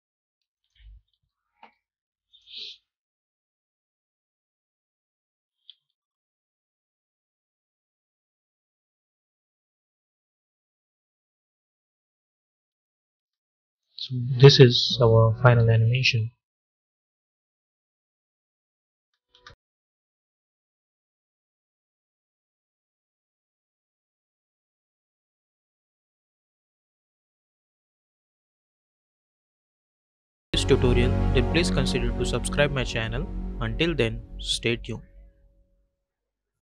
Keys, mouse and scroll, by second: 0.4 shift+click, 1.0 u, 1.6-2.2 scroll down 1, 2.2-5.5 drag, 5.5 ctrl+z, 7.0 click, 8.3 space, 12.6 space, 18.8 space.